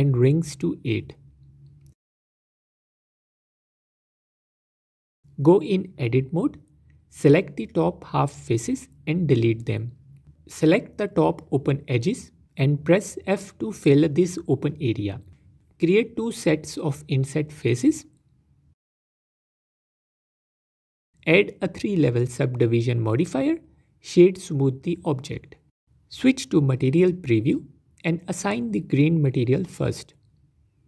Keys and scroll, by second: 5.2 z, 6.0 Tab, 7.4 z, 8.6 x, 9.9 Tab, 12.1 Tab, 14.5 f, 15.6 i, 16.8 i, 20.0 Tab, 21.2 ctrl+3, 26.1 z, 29.3 Tab.